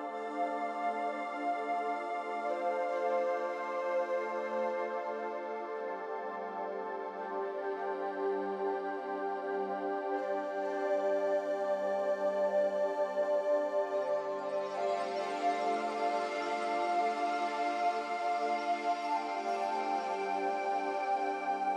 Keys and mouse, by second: 3.0 s, 4.4 s, 6.0 g, 6.8 g, 8.7 s, 12.0 Tab, 14.6 ctrl+r, 18.0 3, 18.9 alt+shift+click.